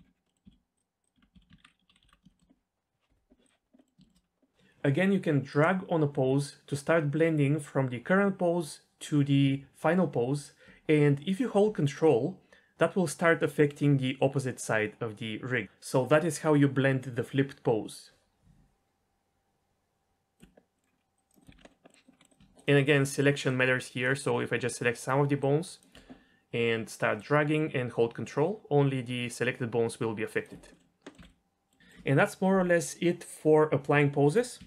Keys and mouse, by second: 0.2 middle drag, 0.4 a, 0.7 click, 1.0 click, 1.1 Tab, 1.3 a, 1.6 alt+r, 1.9 alt+g, 2.0 alt+s, 2.3 shift+middle click, 3.4 click, 3.8 middle click, 4.0 shift+middle click, 5.8 click, 20.7 middle click, 21.2 click, 21.4 click, 21.5 alt+r, 21.6-22.0 middle drag, 22.2 middle drag, 23.0 middle drag, 23.5-24.0 drag, 25.4-25.8 ctrl+drag, 31.0 middle click, 31.2 alt+a, 31.2-31.7 middle drag, 31.8 shift+middle drag, 34.6 a.